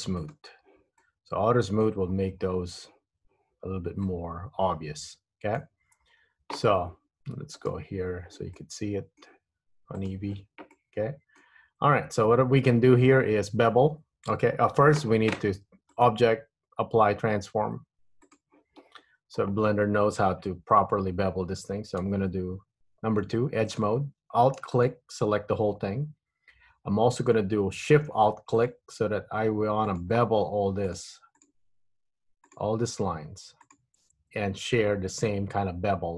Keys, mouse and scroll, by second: 0.3 click, 1.2 middle click, 2.2-3.3 scroll up 1, 4.2 middle click, 6.0-7.3 scroll down 3, 7.8 click, 8.6 middle click, 10.2 click, 11.0 middle click, 11.8-12.4 scroll up 2, 12.4 Tab, 14.9 Tab, 16.0 click, 19.6 Tab, 20.9 scroll up 1, 22.2 2, 23.8 click, 24.8 alt+click, 28.6 alt+shift+click, 29.9 alt+shift+click, 30.9 alt+shift+click, 31.5 alt+shift+click, 32.6 alt+shift+click, 33.8 alt+shift+click.